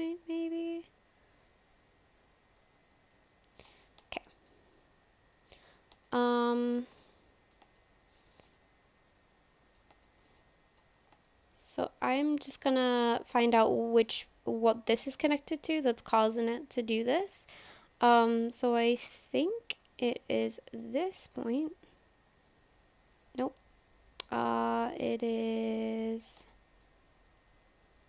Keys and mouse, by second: 0.9-3.1 drag, 4.2 shift+middle click, 6.0 shift+middle click, 7.1 middle click, 7.8 shift+middle click, 8.6-9.8 middle drag, 10.1 shift+middle click, 10.4 middle click, 11.2 shift+middle click, 12.6 middle click, 14.6 middle click, 15.8 middle click, 16.9-18.8 middle drag, 19.2 shift+middle click, 19.7 middle click, 20.8 click, 21.3 click, 21.3-25.5 middle drag, 25.7 middle click, 26.5 shift+middle click.